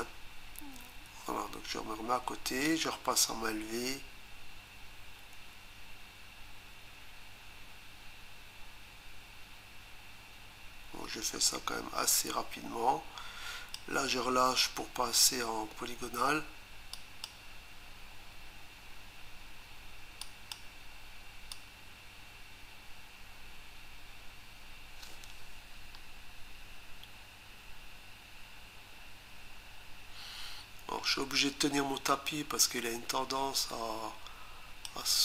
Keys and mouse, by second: 2.7 click, 16.9 click, 20.2 click, 21.5 click.